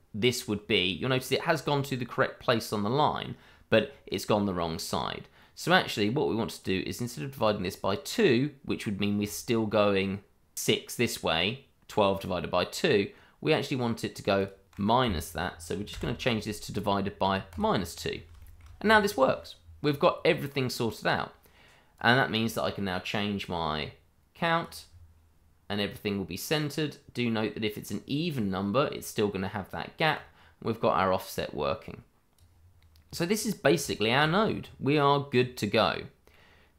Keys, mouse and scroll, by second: 0.8-2.9 scroll up 1, 6.6 click, 14.3 click, 15.0 click, 15.9 -, 16.8-17.4 scroll up 1, 17.4 click, 18.0 scroll down 1, 18.4 shift+middle click, 19.9 scroll down 1, 21.9 click, 24.8-25.2 scroll down 1, 26.4 click, 28.3-30.1 scroll up 1, 30.1 click, 33.4-33.8 scroll down 1, 33.9 shift+middle click, 34.0 middle click, 34.1 shift+middle click, 34.6-35.3 scroll up 1, 35.3-36.7 scroll down 1.